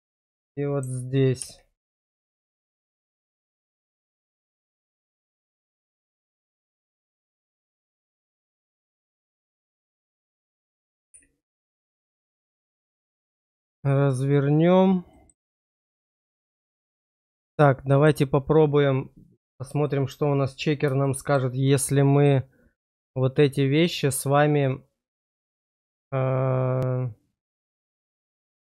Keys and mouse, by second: 2.9 click, 4.0 shift+click, 4.4 click, 6.7-8.0 drag, 9.1 click, 10.9 click, 12.8 click, 15.1 middle click, 15.8 click, 17.6 click, 19.9 shift+click, 21.1 shift+click.